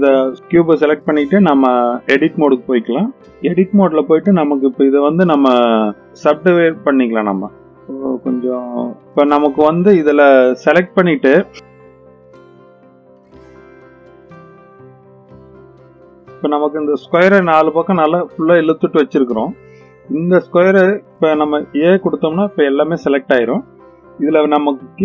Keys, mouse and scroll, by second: 1.1-2.6 drag, 4.3-5.4 right drag, 5.8-6.4 right drag, 6.7-7.2 right drag, 7.5-8.2 right drag, 8.5 click, 8.7-11.5 scroll up 3, 11.6 click, 11.7-16.1 typing, 12.3 middle click, 12.4 click, 12.5 shift+click, 12.9 middle click, 13.2 shift+click, 13.4 shift+click, 13.9 click, 14.1 click, 14.2 middle click, 14.3 click, 14.5 click, 14.8 click, 14.9 click, 15.0 middle click, 15.1 click, 15.2 click, 15.3 click, 15.4 click, 15.5 click, 15.6 middle click, 15.6 click, 15.8-16.2 scroll down 3, 15.9 middle click, 15.9 click, 16.0 middle click, 16.2 middle click, 16.8-17.2 scroll up 3, 17.8-19.0 middle drag, 21.6 a, 24.6-25.0 scroll down 3.